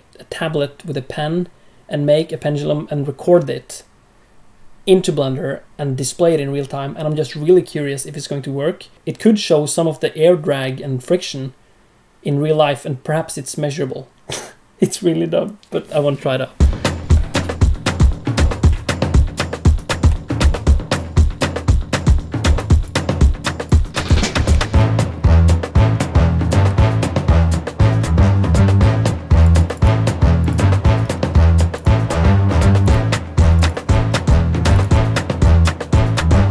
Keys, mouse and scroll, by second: 21.1 ctrl+h, 21.9 click, 22.8 click, 23.9 click, 24.3 click, 24.3 scroll up 3, 24.6 shift+middle click, 24.8 middle click, 25.3 shift+middle click, 25.3 scroll down 1, 25.9 click, 26.2 shift+middle click, 26.5 middle click, 27.1 shift+a, 28.2 scroll down 2, 28.4 g, 29.5 right click, 31.7 click, 32.8 click, 33.8 scroll down 1, 33.9 ctrl+z, 34.7 click.